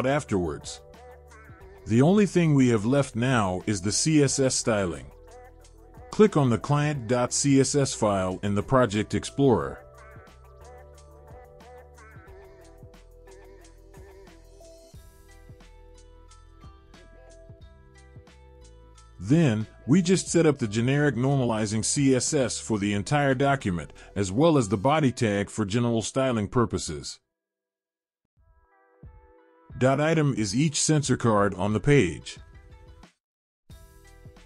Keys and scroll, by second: 17.2 ctrl+z, 18.6 ctrl+z, 19.5 ctrl+z, 26.4 ctrl+z, 29.6 ctrl+z.